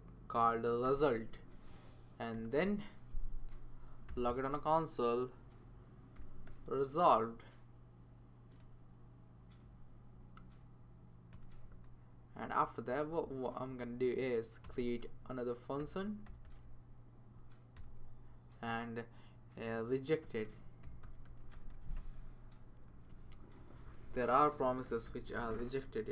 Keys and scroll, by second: 0.6-4.6 typing, 5.9-7.2 typing, 8.6 typing, 10.2 Down, 11.3 Return, 12.4 Right, 12.7 Right, 12.9 Right, 13.9 Right, 14.6 Return, 14.8 Return, 15.5-16.9 typing, 17.8 Return, 20.0-22.2 typing, 22.9 Right, 23.1 Right, 24.1 Left, 24.6-26.1 typing.